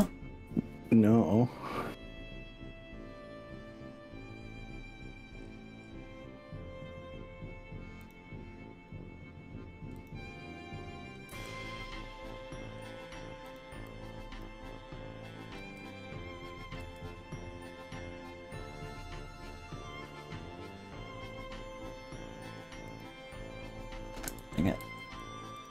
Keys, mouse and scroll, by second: 2.0-2.6 scroll up 3, 3.2-3.6 scroll up 2, 4.4-5.0 scroll up 4, 5.0-6.0 scroll down 5, 8.0 click, 9.0-9.4 scroll up 3, 10.0 click, 11.3 g, 12.4-12.8 scroll up 2, 12.8 scroll down 2, 14.0 click, 15.6 d, 16.8 s, 20.0-21.8 scroll up 11, 22.6 middle click, 23.0 click, 24.4 ctrl+z, 24.8 ctrl+z, 25.6 click.